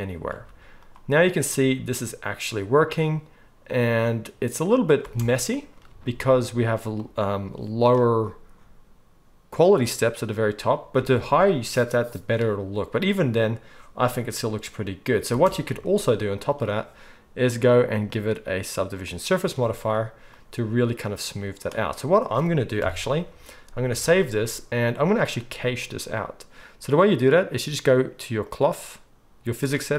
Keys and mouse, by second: 0.4 z, 5.0 space, 11.0 space, 15.4 space, 16.7 middle click, 17.5 click, 17.6 middle click, 18.2-25.2 drag, 22.8 KP_1, 24.0 ctrl+s, 24.1 ctrl+s, 25.2-28.5 middle drag, 28.5 click, 28.6-29.9 middle drag.